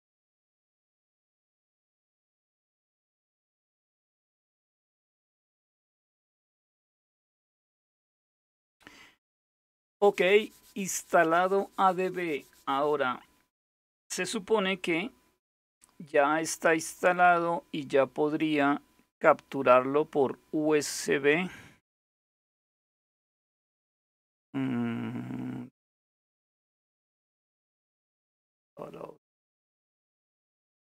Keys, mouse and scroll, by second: 16.4 click, 17.0-17.8 scroll down 2, 23.1-24.1 scroll down 1, 24.8-25.5 scroll up 2, 25.5-26.9 scroll down 3, 26.9-28.1 scroll up 3, 28.1 scroll up 1, 28.3-29.0 scroll down 2, 29.0 scroll down 1, 29.8-30.4 scroll down 2, 30.4-30.8 scroll down 1.